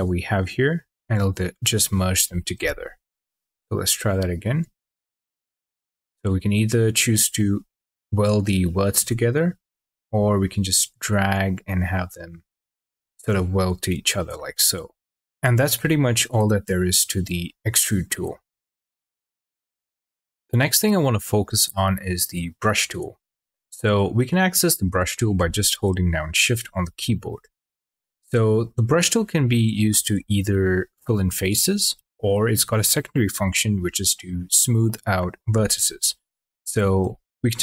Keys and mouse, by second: 2.4 ctrl+z, 8.9 ctrl+z, 9.6 ctrl+z, 10.6 click, 14.2 shift+middle drag, 35.0 middle click, 36.4 1.